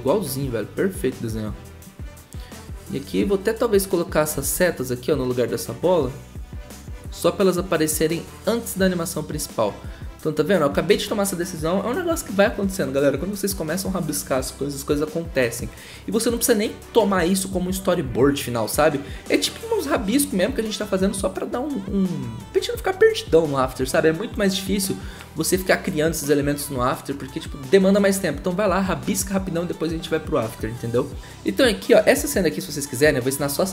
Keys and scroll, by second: 4.5 ctrl+z.